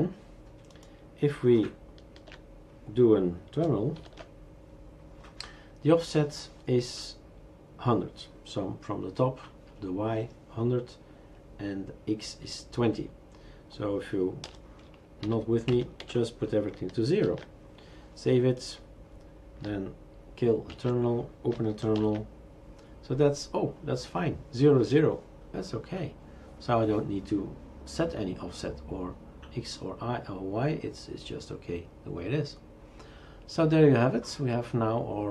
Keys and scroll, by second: 2.2 shift+super+q, 4.0 ctrl+alt+t, 14.4 BackSpace, 15.2 Delete, 15.7 Down, 16.0 Delete, 17.2 ctrl+s, 20.7 shift+super+q, 22.0 ctrl+alt+t.